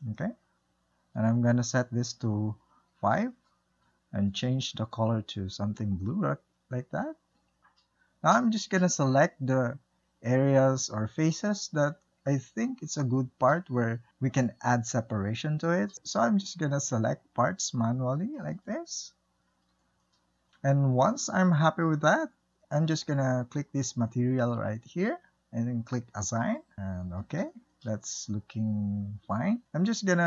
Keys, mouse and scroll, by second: 5.5 click, 8.5-12.7 shift+middle drag, 14.3 shift+middle click, 15.1 alt+click, 15.2 middle click, 15.6 shift+click, 15.7 middle click, 16.2 middle click, 16.3 click, 16.6 middle click, 17.2 scroll up 2, 17.2 shift+middle click, 17.4 shift+click, 17.8 scroll down 2, 18.0-19.4 typing, 18.3 middle click, 18.8 middle click, 19.5 scroll up 1, 19.7-22.7 shift+middle drag, 22.7 click, 25.8-26.8 drag, 26.8 Tab, 27.4 scroll down 1, 27.6-28.6 middle drag, 28.6 scroll up 1, 28.9-30.2 middle drag.